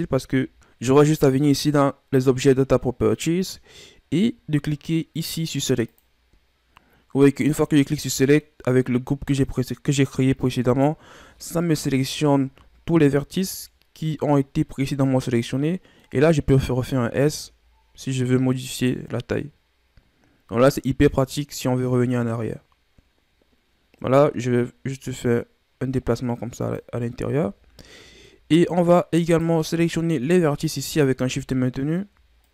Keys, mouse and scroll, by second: 0.3 a, 5.8-7.3 drag, 7.3-10.4 middle drag, 11.8 KP_Divide, 12.7-13.1 scroll down 2, 13.1-13.5 scroll up 1, 13.5-16.5 middle drag, 16.5 s, 27.7 scroll down 2, 27.9-29.3 middle drag, 29.3 right click, 29.7 scroll up 1, 29.8-30.8 middle drag, 30.8 shift+right click, 31.4 scroll down 1, 31.5 middle click, 32.4 shift+right click.